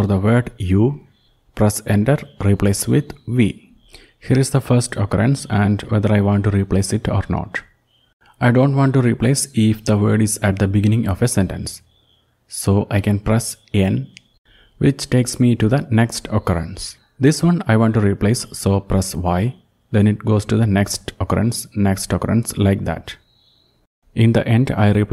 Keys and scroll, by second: 0.0-0.4 typing, 0.5 Return, 1.9-2.7 typing, 14.4 typing, 17.3 typing, 22.7-23.6 typing.